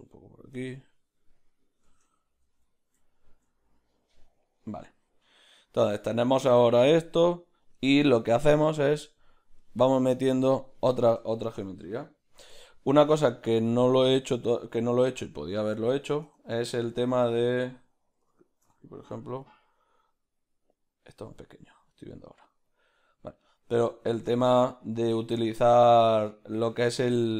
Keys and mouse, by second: 2.1 Tab, 2.1-3.1 drag, 3.0 z, 3.1-19.9 ctrl+middle drag, 16.9 b, 19.9 click, 24.0 shift+click, 24.4-25.8 middle drag, 25.8 click, 26.8 middle click.